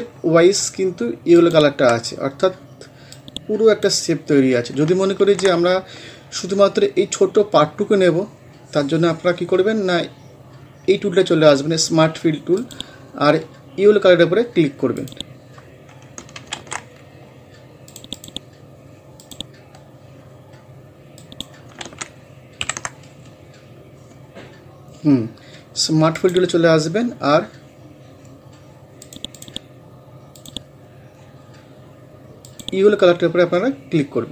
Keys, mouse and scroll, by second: 5.2 ctrl+z, 6.4 scroll up 1, 12.6 click, 15.0 click, 16.6 ctrl+z, 17.9 click, 21.9 ctrl+z, 22.6 ctrl+End, 26.2 click, 29.0 click.